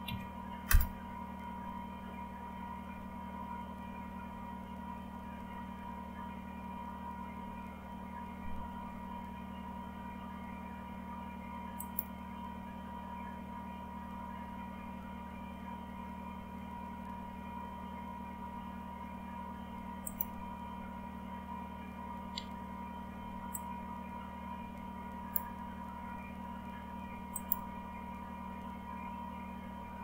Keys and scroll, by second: 0.0-0.5 typing, 0.6 Return.